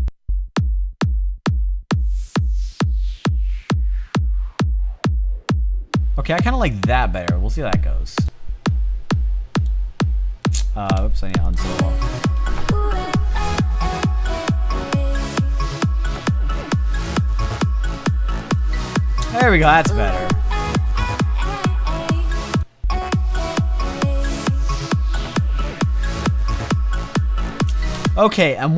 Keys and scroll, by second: 27.3 space.